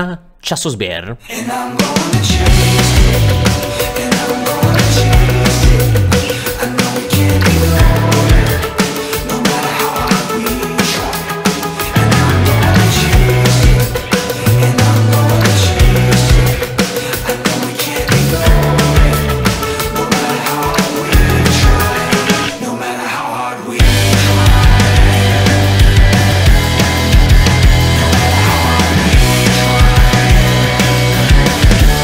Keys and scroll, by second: 2.6 Page_Up, 2.6 Page_Down, 3.1 Page_Down, 3.3 Page_Down, 3.6 Page_Down, 3.9 Page_Down, 4.1 Page_Down, 4.3 Page_Down, 4.5 Page_Down, 4.7 Page_Down, 4.9 Page_Down, 5.1 Page_Down, 5.3 Page_Down, 5.4 Page_Down, 5.6 Page_Down, 5.9 Page_Down, 6.2 Page_Down, 6.4 Page_Down, 6.6 Page_Down, 6.9 Page_Down, 7.1 Page_Down, 7.4 Page_Down, 7.8 Page_Down, 8.0 Page_Down, 8.3 Page_Down, 8.6 Page_Down, 8.9 Page_Down, 9.1 Page_Down, 9.4 Page_Down, 9.6 Page_Down, 9.8 Page_Down, 10.0 Page_Down, 10.2 Page_Down, 10.4 Page_Down, 10.6 Page_Down, 10.8 Page_Down, 11.0 Page_Down, 11.2 Page_Down, 11.4 Page_Down, 11.6 Page_Down, 11.8 Page_Down, 12.0 Page_Down, 12.2 Page_Down, 12.3 Page_Down, 12.5 Page_Down, 12.7 Page_Down, 12.9 Page_Down, 13.1 Page_Down, 13.3 Page_Down, 13.5 Page_Down, 13.7 Page_Down, 13.9 Page_Down, 14.1 Page_Down, 14.3 Page_Down, 14.5 Page_Down, 14.8 Page_Down, 15.0 Page_Down, 15.2 Page_Down, 15.4 Page_Down, 15.6 Page_Down, 15.8 Page_Down, 16.2 Page_Up, 18.1 Page_Up, 19.0 Page_Down, 19.6 Page_Down, 19.9 Page_Down, 20.4 Page_Down, 20.6 Page_Down, 20.9 Page_Down, 21.2 Page_Down, 21.5 Page_Down, 22.0 Page_Down, 22.4 Page_Down, 22.7 Page_Down, 22.9 Page_Down, 23.2 Page_Down, 23.5 Page_Down, 23.8 Page_Down, 24.1 Page_Down, 24.2 Page_Down, 24.5 Page_Down, 24.8 Page_Down, 25.2 Page_Down, 25.5 Page_Down, 25.8 Page_Down, 26.1 Page_Down, 26.4 Page_Down, 26.8 Page_Down, 27.1 Page_Down, 27.4 Page_Down, 28.2 Page_Down, 28.5 Page_Down, 28.8 Page_Down, 29.1 Page_Down, 29.4 Page_Down, 29.7 Page_Down, 30.0 Page_Down, 30.3 Page_Down, 30.6 Page_Down, 31.1 Page_Down, 31.5 Page_Down, 31.8 Page_Down.